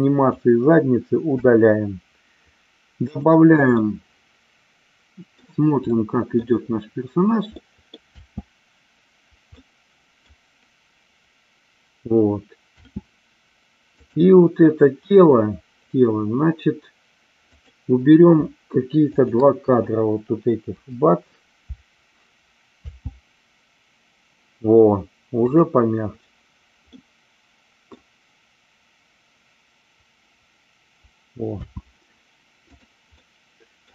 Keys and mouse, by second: 1.3 Delete, 3.1 click, 3.8-5.4 middle drag, 5.9 middle click, 7.6 middle click, 8.1 space, 9.7 middle click, 12.9 space, 13.9-15.0 drag, 17.5 click, 19.0 shift+click, 20.7 Delete, 22.7 space, 27.0-27.8 middle drag, 31.6 space, 33.1-33.9 middle drag.